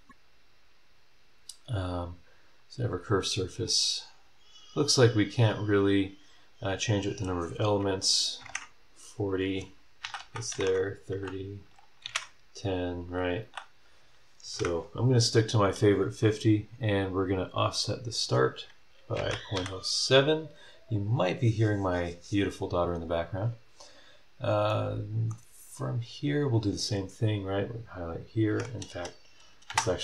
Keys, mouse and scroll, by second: 2.5 click, 3.1-3.6 scroll up 1, 3.6 click, 8.4 KP_4, 8.4 KP_0, 10.0-13.1 typing, 14.4 KP_5, 14.5 KP_0, 17.7 click, 19.1 KP_Decimal, 19.3 KP_0, 19.5 KP_7, 20.8 click, 23.7 scroll down 2, 24.3 scroll up 2, 24.7 middle click, 25.5 scroll up 2, 27.7 middle click, 28.8 ctrl+click, 29.4 click, 29.7 space.